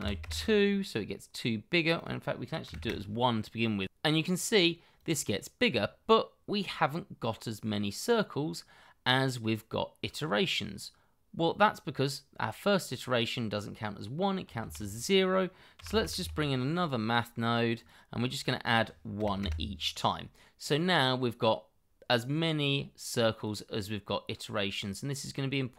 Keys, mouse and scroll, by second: 0.0 KP_2, 0.2 Return, 2.6 1, 2.8 Return, 6.3-7.2 scroll up 1, 7.2-8.8 scroll down 1, 14.6 shift+a, 15.7 m, 15.8 a, 16.0 t, 16.2 h, 19.1 1, 19.4 Return, 20.6 middle click, 21.8-23.8 scroll down 1, 24.7 double click.